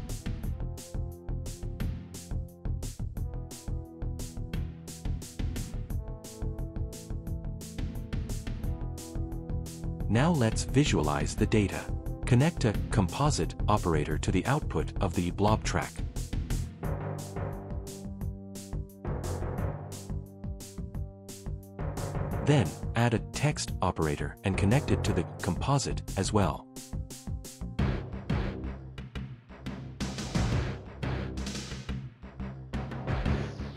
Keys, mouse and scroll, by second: 1.2 n, 2.3 click, 3.7-5.0 typing, 6.6-7.7 typing, 8.8 click, 11.1 right click, 11.3 c, 14.1-15.5 typing, 19.9 click, 21.7 click, 23.5 click, 25.1 click, 28.1 click, 29.0 click, 32.3 click.